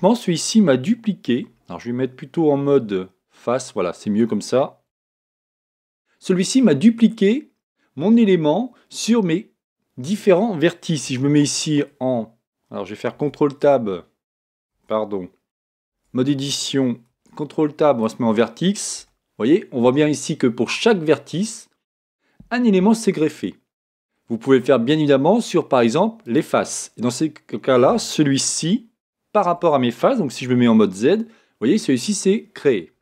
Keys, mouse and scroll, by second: 1.4 f, 2.5 z, 3.4-6.7 middle drag, 11.0 z, 11.9 z, 13.3 ctrl+Tab, 14.7 ctrl+Tab, 16.0 Tab, 17.2 ctrl+Tab, 19.0 a, 19.4-22.6 middle drag, 23.3-25.2 middle drag, 26.2 click, 27.0-30.7 middle drag, 30.4 z, 31.1-33.0 middle drag.